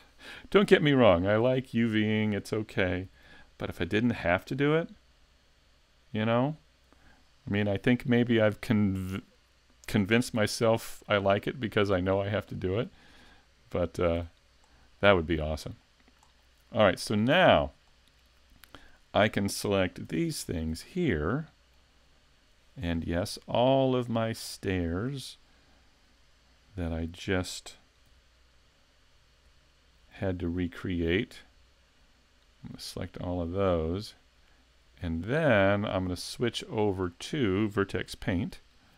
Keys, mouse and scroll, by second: 0.0-0.8 scroll up 3, 0.8 shift+middle click, 2.0-3.1 scroll up 1, 3.1-6.5 typing, 7.5 scroll down 1, 7.9 middle click, 10.4 l, 10.8 scroll down 2, 11.3 middle click, 12.2 scroll down 1, 12.6 middle click, 14.2 l, 14.6 scroll down 1, 15.0 shift+middle click, 15.8 middle click, 16.4-17.0 scroll up 2, 17.0 shift+middle click, 17.9 middle click, 20.1 l, 20.8 l, 21.3 middle click, 22.4 l, 22.8 scroll up 3, 23.2 middle click, 24.6 shift+middle click, 28.1 l, 29.5-34.9 typing, 35.4-35.9 scroll down 2, 35.9 middle click, 35.9 scroll down 1, 36.7-37.1 scroll down 1, 37.1 middle click, 38.1 shift+middle click.